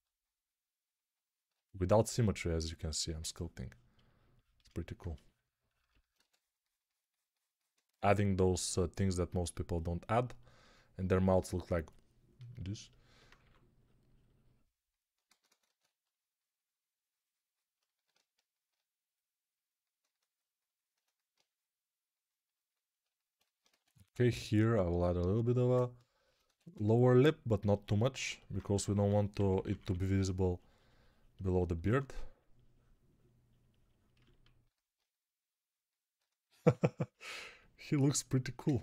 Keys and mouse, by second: 6.0 z, 15.1 ctrl+z, 23.5 x, 26.3 1, 28.8-29.7 typing, 31.7 1, 36.5 2.